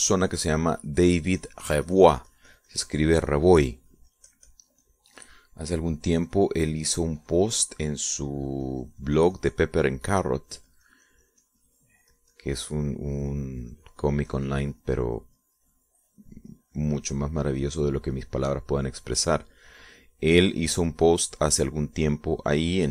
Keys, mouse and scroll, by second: 12.1-13.8 drag, 13.9-22.3 drag, 22.3-22.9 drag.